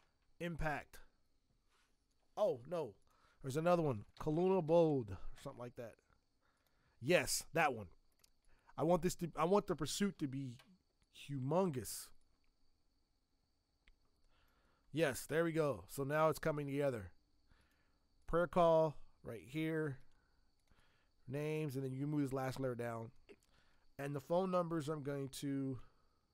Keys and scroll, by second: 3.9-5.2 typing, 10.1 ctrl+t, 24.1 t.